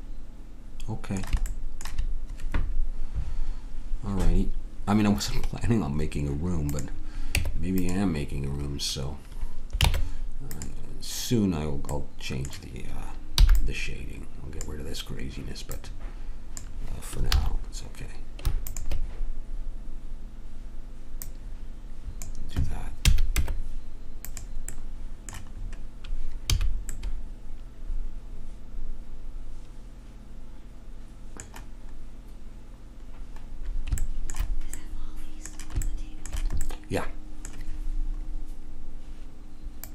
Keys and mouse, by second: 1.5-4.6 drag, 6.6-7.9 drag, 7.3 Tab, 9.8 ctrl+Tab, 13.4 b, 17.3 ctrl+z, 18.6-20.5 drag, 21.2 click, 23.1 a, 23.4 Tab, 24.6 click, 26.6 a, 33.4-35.8 middle drag, 39.8 click.